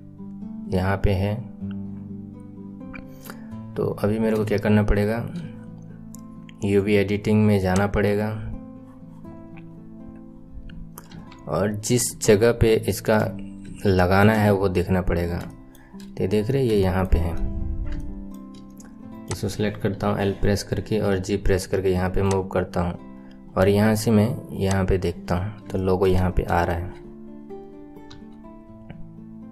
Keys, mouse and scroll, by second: 4.0-4.4 scroll down 1, 4.4-7.3 shift+middle drag, 9.6 click, 11.0 KP_1, 11.4-12.3 scroll up 10, 12.3 shift+middle click, 13.3 scroll up 6, 13.7-19.2 shift+middle drag, 19.2 click, 21.1 g, 24.7 click, 25.2-25.7 scroll up 1, 25.7 shift+middle click, 26.1-26.6 scroll up 4, 26.6-28.1 shift+middle drag, 28.1 s.